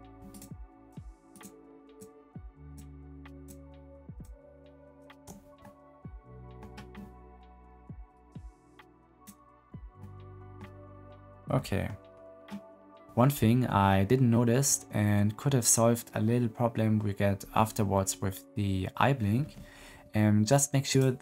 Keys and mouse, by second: 0.2 shift+middle click, 2.6 shift+middle click, 5.5-6.5 middle drag, 8.3 middle click, 9.9 click, 20.8 click.